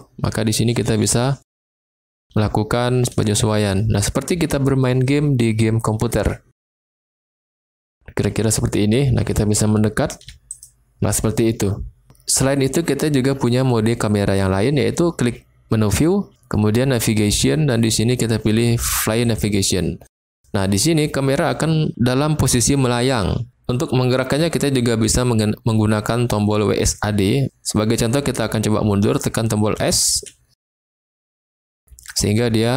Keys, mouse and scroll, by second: 0.0-0.4 typing, 2.3-10.3 typing, 10.5 click, 16.0-32.7 drag, 29.7 s, 30.1 s, 31.0 s.